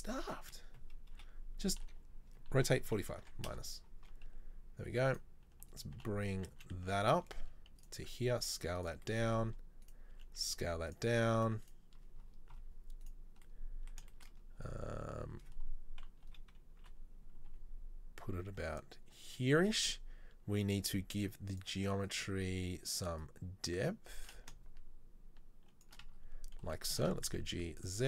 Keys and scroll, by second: 1.4 KP_3, 2.7 r, 6.1 g, 8.1 s, 10.2 s, 16.3 KP_3, 16.9 KP_1, 17.5 g, 27.2 g.